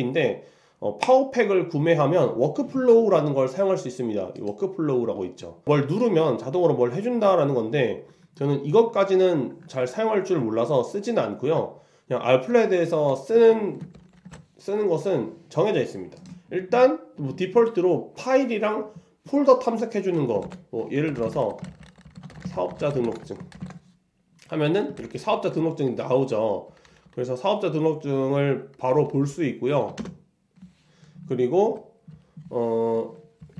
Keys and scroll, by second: 29.9 Return.